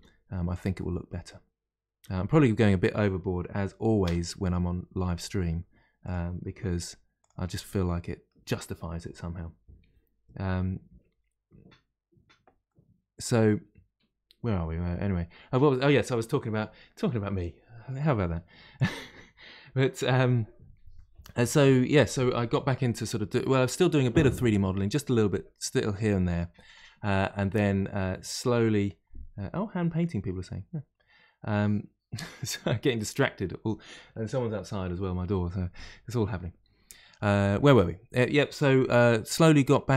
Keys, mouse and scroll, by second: 0.7-2.0 middle drag, 2.0 r, 6.6 s, 7.4-10.4 middle drag, 12.6-15.6 middle drag.